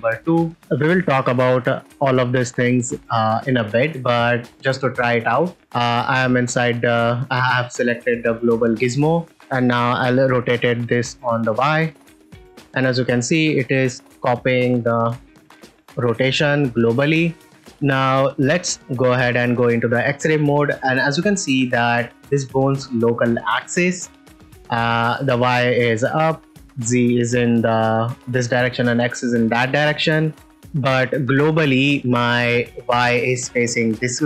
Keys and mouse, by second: 0.5 ctrl+s, 3.6 ctrl+middle click, 4.5 click, 5.0 middle click, 7.7 middle drag, 8.7 middle click, 9.9 r, 10.0 y, 13.7-14.3 middle drag, 14.9 r, 15.1 r, 17.9 click, 19.0 z, 20.4 ctrl+middle click, 21.2 shift+middle drag, 21.5-21.8 ctrl+middle drag, 22.3 click, 26.3 middle click, 29.9 ctrl+middle click, 30.2 shift+middle drag, 30.6 middle drag, 31.3 ctrl+middle drag.